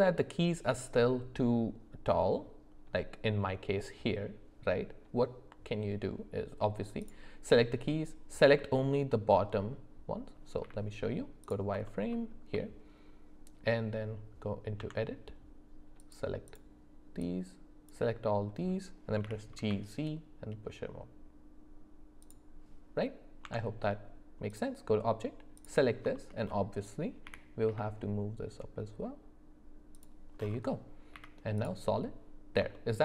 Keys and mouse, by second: 7.0 click, 10.6 z, 11.8 alt+middle click, 12.1 alt+middle click, 14.8 Tab, 16.5 click, 17.3 click, 19.2 g, 23.4 Tab, 26.1 shift+middle click, 27.2 g, 31.1 z, 31.9 middle click, 32.7 shift+middle click.